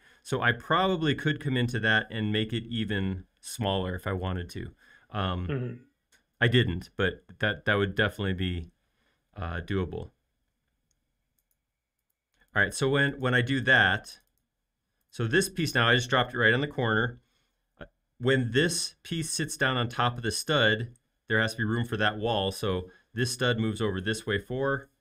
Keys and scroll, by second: 22.9 m, 24.2-25.0 typing.